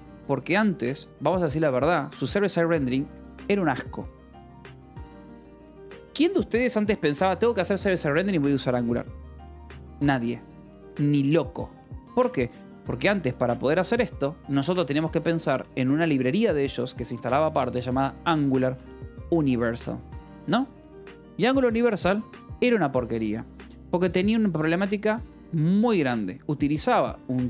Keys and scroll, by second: 1.4 space, 5.2 BackSpace, 12.7 space, 12.7 =, 13.8-16.3 typing, 18.5-19.6 typing, 26.9 o, 27.3 Return.